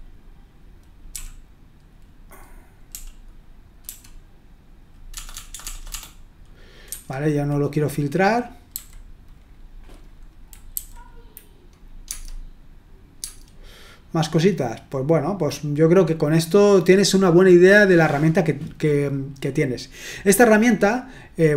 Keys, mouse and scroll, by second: 1.1 d, 2.9-3.8 typing, 5.1-5.9 typing, 6.8 Escape, 8.7 h, 12.0 Tab, 13.2 Tab.